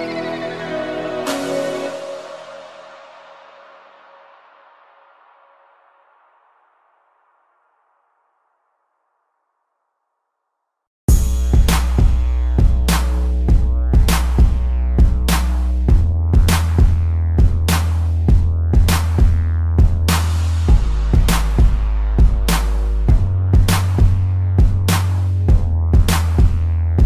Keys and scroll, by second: 1.8-4.3 typing, 4.8 Return, 6.3 z, 9.1 space, 11.0 p, 19.5 ctrl+=, 20.4 space.